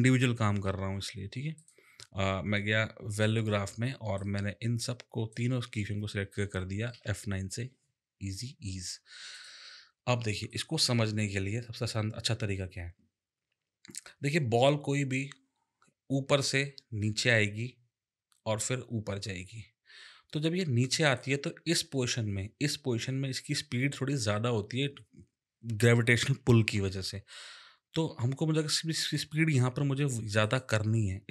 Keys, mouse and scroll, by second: 1.6 click, 3.1 click, 6.9 click, 10.5 click, 30.4 click.